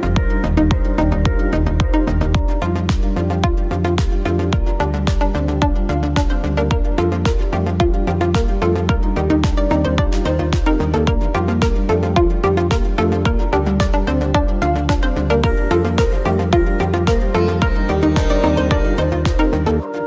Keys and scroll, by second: 0.0-3.3 typing, 3.4 ctrl+a, 7.2 ctrl+t, 10.6 space, 13.6 shift+space.